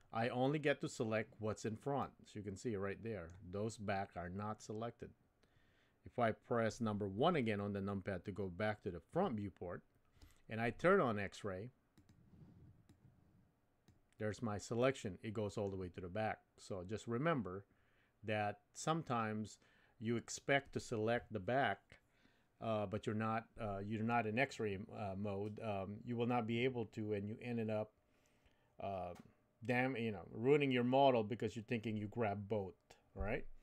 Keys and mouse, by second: 2.0-3.3 middle drag, 9.1 KP_1, 12.0 click, 12.8-14.3 drag, 14.8 middle click.